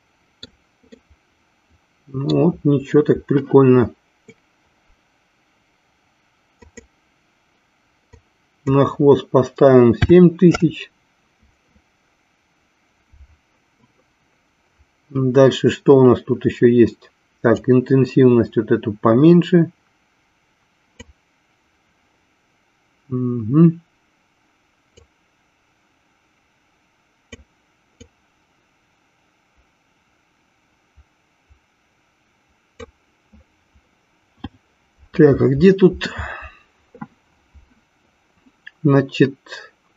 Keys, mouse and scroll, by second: 1.2-2.7 middle drag, 6.5-12.3 drag, 17.5-21.3 drag, 24.9-27.8 drag, 28.4-33.3 drag.